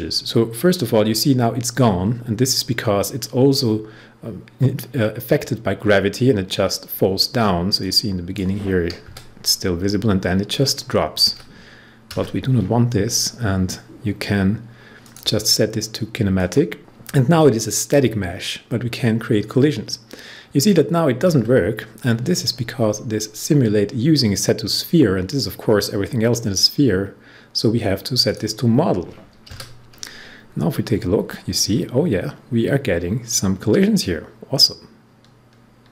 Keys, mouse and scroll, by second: 7.8-10.7 drag, 15.0 click, 16.3 click, 24.6 click, 28.2 click.